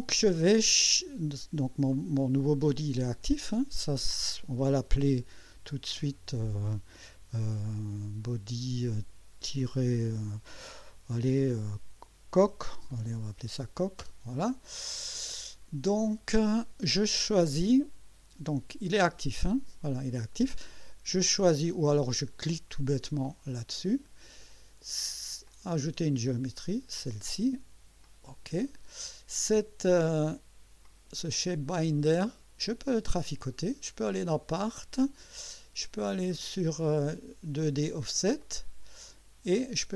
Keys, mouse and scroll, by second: 5.3 click, 6.0 F2, 8.2 click, 9.6 -, 11.9-13.5 typing, 14.0 Return, 19.0 click, 23.7 click, 25.5 click, 26.6 click, 28.0 click, 30.9 click, 33.2 click, 34.1 click, 36.3 click, 38.4 click.